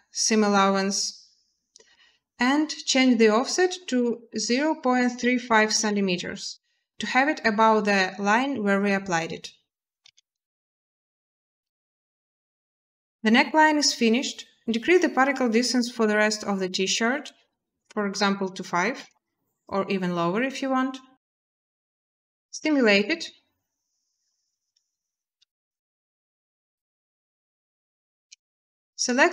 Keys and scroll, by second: 5.2 typing, 5.5 Return, 9.8 a, 16.6 a, 18.7 5, 18.9 Return, 22.3 space, 27.9 space.